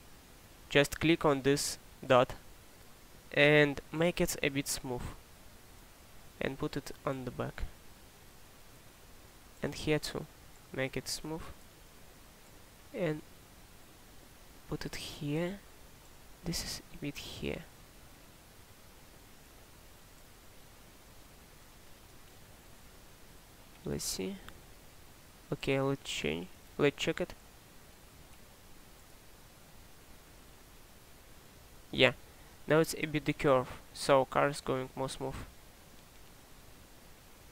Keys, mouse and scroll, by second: 23.1 click, 28.0 click, 31.5 click.